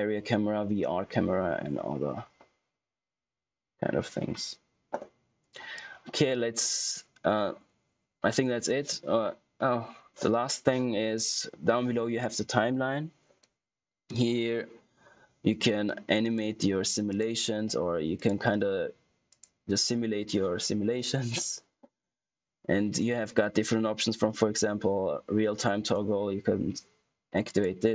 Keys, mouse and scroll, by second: 5.7 click, 16.1 click, 27.4 click.